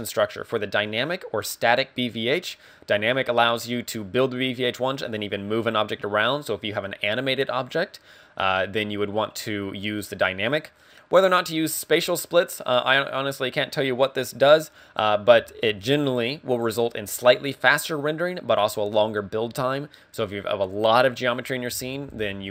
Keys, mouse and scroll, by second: 0.7 click.